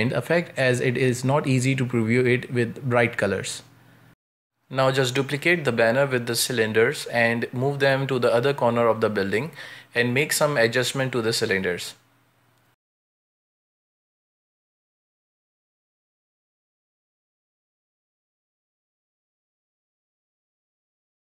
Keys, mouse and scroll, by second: 0.0-0.7 middle drag, 0.7 scroll down 2, 1.0-3.4 shift+middle drag, 3.4 scroll down 3, 3.5-4.4 shift+middle drag, 4.4 scroll up 2, 4.6 z, 4.8 space, 5.6 right click, 6.1-6.9 right drag, 6.9 shift+middle click, 7.2 scroll down 3, 7.3 shift+middle click, 7.6 shift+d, 8.8 r, 10.2 scroll down 2, 10.3-10.7 shift+middle drag, 10.7 scroll up 2, 11.0 g, 11.5 z, 11.6 shift+middle click, 11.9 g, 12.6 g, 13.1 shift+middle click, 13.4-13.8 scroll up 3, 13.8 g, 14.5 shift+middle click, 15.3 scroll down 2, 15.6 middle click, 16.0 Tab, 16.4-18.9 typing, 20.2 middle click, 20.4 Tab, 20.5 scroll down 2, 20.6 shift+middle drag, 20.7 z, 21.0 shift+middle drag, 21.2 a, 21.3 a.